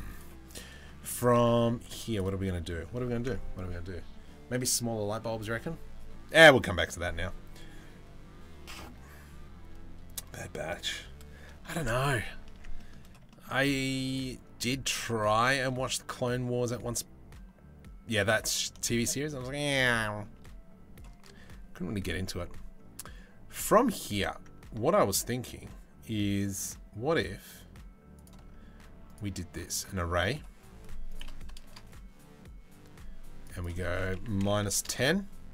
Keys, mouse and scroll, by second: 0.1 Tab, 0.4 middle click, 1.5 3, 1.7 click, 11.2 shift+middle click, 12.1 Tab, 12.3 middle click, 12.9 shift+middle click, 14.2 middle click, 15.2 shift+middle click, 15.9-17.9 middle drag, 18.6 middle click, 19.0 middle click, 19.5 shift+middle click, 23.7 g, 28.7-29.5 right drag, 30.7 right click, 33.2-34.5 right drag.